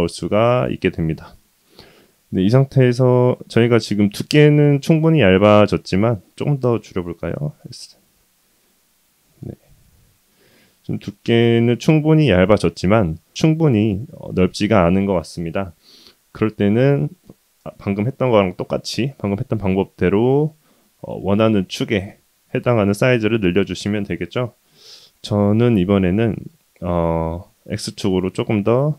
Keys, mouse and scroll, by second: 0.9-3.6 middle drag, 4.0-4.9 scroll up 2, 4.9 scroll up 1, 5.0-6.0 middle drag, 7.3 s, 9.6-12.0 middle drag, 12.3 middle drag, 12.8-15.6 middle drag, 15.9-16.4 middle drag, 16.6-17.1 middle drag, 19.4-21.0 middle drag, 21.3-21.7 scroll down 2, 22.8-23.8 middle drag, 24.3-25.1 middle drag, 26.0 middle click, 28.0 s.